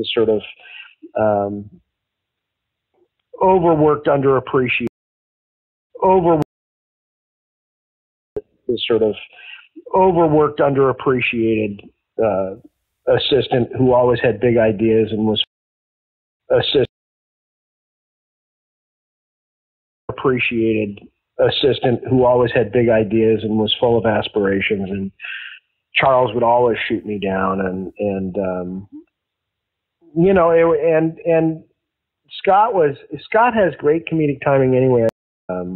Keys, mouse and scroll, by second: 0.1 click, 1.9-4.9 drag, 4.8 space, 5.5 ctrl+shift+Delete, 5.8 space, 6.3 space, 6.6 click, 7.4 click, 8.2 click, 8.2 space, 10.1 ctrl+s, 11.5 click, 12.2 click, 13.5-15.4 drag, 15.4 space, 16.0 ctrl+shift+Delete, 16.3 space, 16.8 space, 17.5 click, 18.5 click, 19.9 click, 20.0 space, 23.4-24.7 drag, 25.1 click, 25.9 click, 26.8 click, 28.3 click, 29.7 ctrl+s, 30.9-35.0 drag, 35.0 space, 35.4 click, 35.4 space.